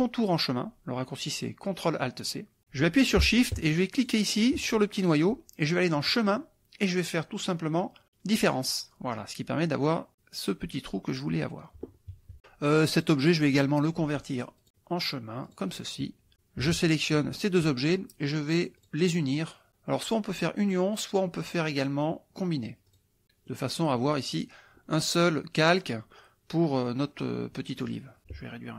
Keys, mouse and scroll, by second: 4.0 shift+click, 6.1 click, 8.4 click, 13.0 click, 14.6 click, 15.7 click, 17.0 shift+click, 18.8 click, 22.9 click, 23.5 middle click.